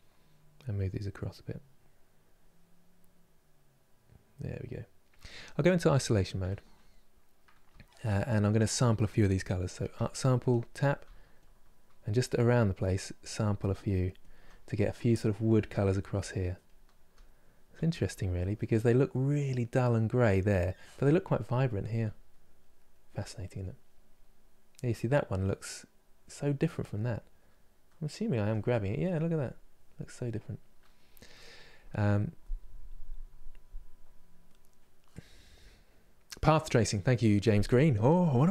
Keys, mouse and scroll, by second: 0.3-6.0 drag, 6.0 KP_Divide, 6.6-30.1 middle drag, 30.1-38.5 drag.